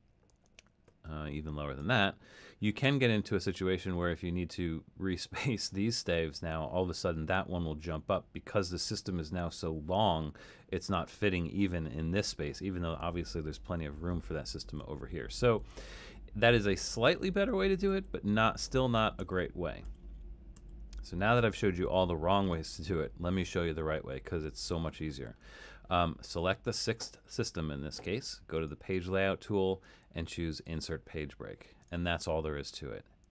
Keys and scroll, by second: 14.7 super+z, 15.6 super+z, 17.1 super+z, 17.9 super+z, 18.5 super+z, 19.2 super+z, 20.6 super+z.